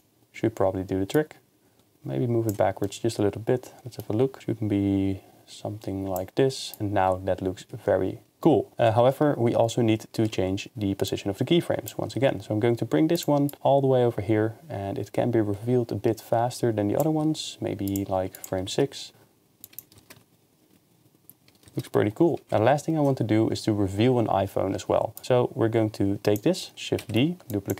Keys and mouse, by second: 1.1-2.5 drag, 2.8 middle drag, 4.4-6.3 drag, 6.7-7.0 drag, 7.0 KP_0, 9.2 ctrl+Tab, 10.2 ctrl+Tab, 11.1 click, 12.2 g, 13.1-13.5 drag, 17.2 g, 17.9-18.4 drag, 18.7 shift+space, 19.1 KP_0, 19.6 click, 20.0 shift+space, 27.4 shift+d, 27.5-27.7 drag.